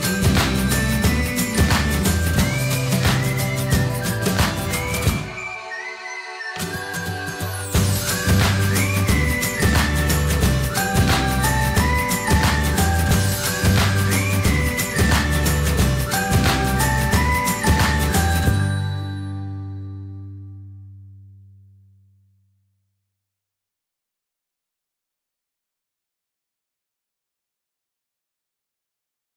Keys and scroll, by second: 1.9-3.2 typing.